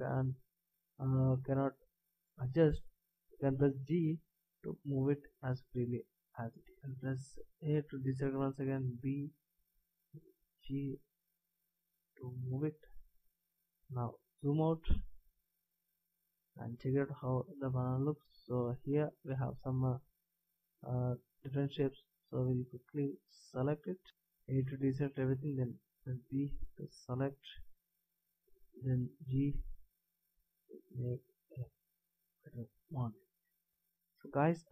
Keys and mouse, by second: 0.1-1.2 middle drag, 3.9 g, 7.9 a, 8.8 b, 10.1 b, 10.1 g, 17.3-19.0 middle drag, 22.5 b, 25.2 a, 26.9 b, 29.1 g, 33.5 a.